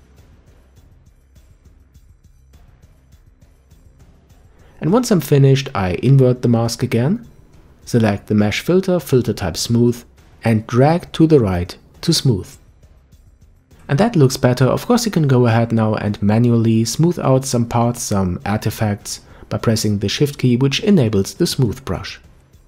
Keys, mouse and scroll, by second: 0.0 middle click, 0.5 click, 1.0 scroll down 2, 1.3 middle click, 2.0-2.6 scroll up 3, 2.6 click, 3.2-5.0 scroll down 1, 5.0 ctrl+i, 7.7 click, 9.0 click, 13.4 click, 16.2 alt+m, 16.6 middle drag, 16.9-17.2 scroll up 1, 17.2 click, 17.4-18.4 shift+drag, 19.5 scroll down 1, 19.7 middle click, 20.2-20.6 scroll up 2, 20.6 shift+click, 21.5 ctrl+z, 22.0 shift+click, 22.4 middle click.